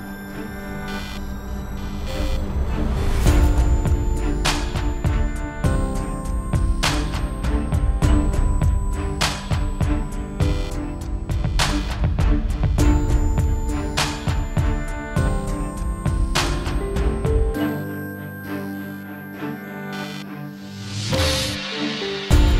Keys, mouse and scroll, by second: 0.3 s, 0.8 click, 1.4 scroll up 3, 1.5-2.6 scroll down 8, 1.7 click, 2.2 middle click, 2.3 KP_Decimal, 2.6 z, 2.8 scroll up 3, 2.9 middle click, 3.1 s, 4.0 click, 5.1 alt+a, 5.1 scroll up 3, 5.3 scroll down 1, 5.4 click, 5.4 scroll down 2, 5.8 click, 6.9 middle click, 7.0 scroll down 5, 7.2 KP_Decimal, 7.3 scroll up 3, 7.4 middle click, 7.7 click, 8.6 click, 9.4 scroll down 1, 9.4 shift+middle click, 9.7 s, 10.2 click, 11.2 alt+a, 11.2 scroll down 5, 11.4 shift+middle click, 11.4 scroll up 2, 11.5 middle click, 11.6 scroll down 2, 11.7 shift+middle click, 11.8 scroll up 1, 12.1 scroll down 1, 12.2 middle click, 12.2 scroll up 1, 12.3 middle click, 12.8 shift+middle click, 13.4 click, 13.6-14.9 scroll down 9, 14.0 click, 14.3 KP_Decimal, 14.6 middle click, 19.3 ctrl+space, 19.5 alt+a, 19.6 scroll up 7, 20.5 click, 20.8 click, 21.2 Delete, 21.2 click, 21.6-22.1 scroll down 9, 21.7 middle click, 22.1 scroll up 5, 22.2 scroll down 1, 22.3 shift+middle click, 22.3 scroll down 1, 22.4-22.5 scroll up 3.